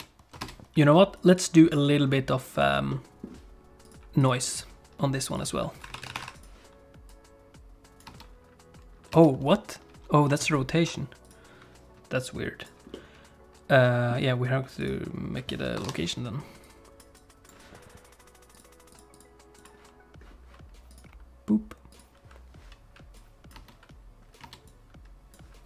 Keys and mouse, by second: 0.0 ctrl+space, 0.5 space, 1.2 click, 2.5 click, 2.9 click, 3.8 click, 4.2 click, 5.9 click, 7.1 click, 8.1 space, 9.2 space, 10.4 ctrl+z, 11.3 click, 12.3 click, 12.9-14.1 middle drag, 14.8 click, 16.6 click, 17.2 click, 18.5 click, 18.9 click, 19.1 click, 19.6 click, 20.9 click, 23.2 click, 23.6 space, 24.5 space, 24.7 click.